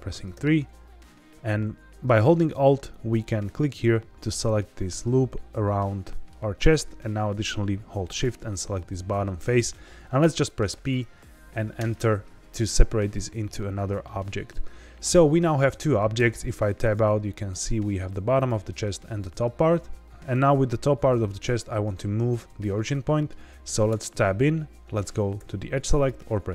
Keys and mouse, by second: 0.3 3, 3.0 alt+click, 5.4 middle click, 8.9 middle click, 10.6 p, 16.1 Tab, 16.8 click, 18.4 click, 22.7-23.2 middle drag, 23.8 Tab, 25.3 2, 25.9 click.